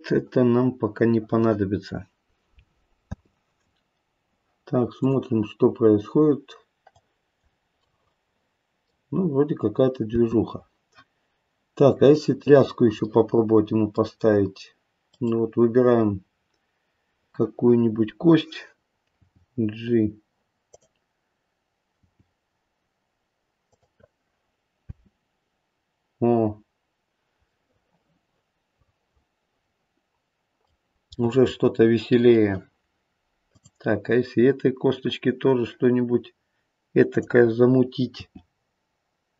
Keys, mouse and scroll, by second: 0.2 click, 3.1 space, 4.9 click, 7.4 click, 7.7 middle click, 10.1 space, 12.0 click, 13.1 middle click, 15.0 click, 16.3-17.0 scroll up 2, 19.1 click, 19.6 g, 20.7 click, 22.0 g, 24.8 space, 26.4-27.5 scroll down 1, 27.5 middle click, 28.1 middle click, 29.4 middle click, 31.1 middle click, 33.4 click, 37.1 click, 38.1 g.